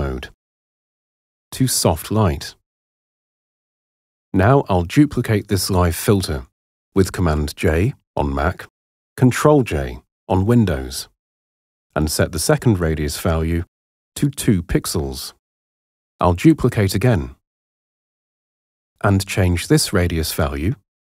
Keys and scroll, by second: 5.9 super+j, 12.5 2, 13.6 Return, 17.4 super+j.